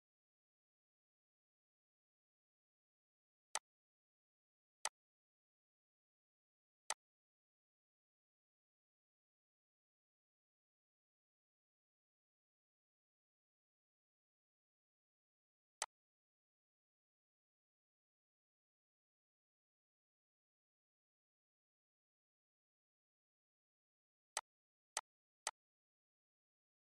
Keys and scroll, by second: 11.5 ctrl+a, 12.8 ctrl+a, 25.0 ctrl+g, 26.5 ctrl+g.